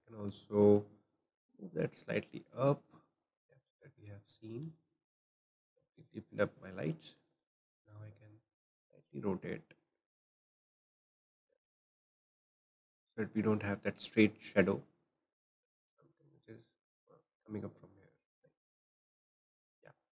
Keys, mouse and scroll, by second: 0.4-1.4 shift+middle drag, 1.4 click, 2.7-4.8 drag, 4.8-9.1 shift+middle drag, 9.1 click, 12.0 shift+middle click, 12.8 click, 14.7 click, 19.2-20.1 shift+middle drag.